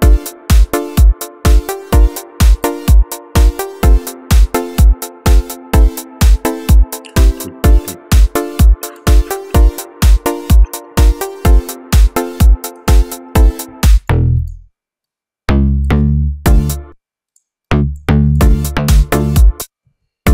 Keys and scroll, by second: 13.6 space, 13.9 c, 16.3 space, 18.2 space.